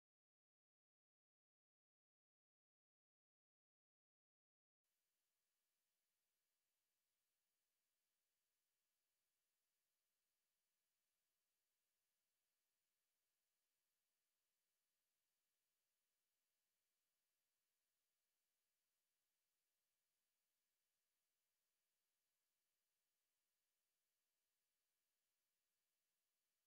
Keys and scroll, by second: 4.8 alt+shift+F9, 10.4-11.2 typing, 12.3-13.1 typing, 14.4-15.1 typing, 16.2 typing, 17.5-26.5 typing.